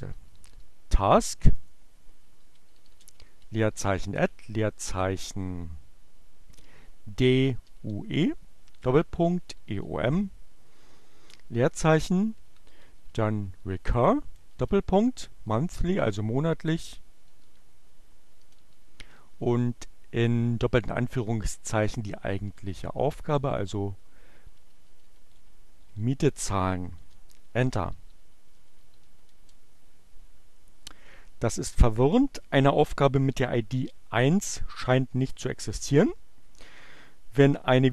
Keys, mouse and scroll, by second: 1.0 click, 2.1-4.1 typing, 5.9-6.9 typing, 8.5-9.8 typing, 11.2-13.9 typing, 16.0-17.6 typing, 18.8 y, 18.9 space, 19.5 shift+2, 21.7-26.3 typing, 26.6 Return, 27.5-29.7 typing.